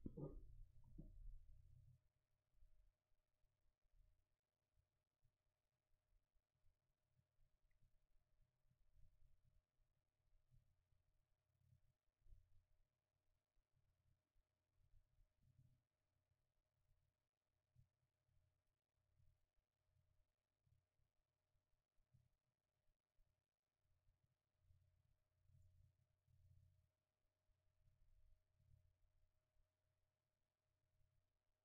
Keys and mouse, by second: 12.0-16.0 middle drag, 24.0 middle click.